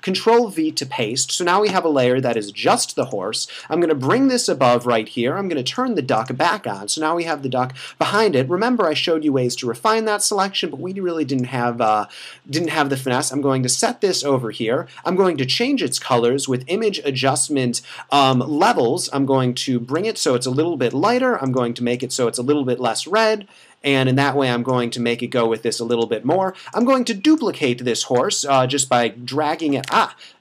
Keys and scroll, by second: 30.0 Escape.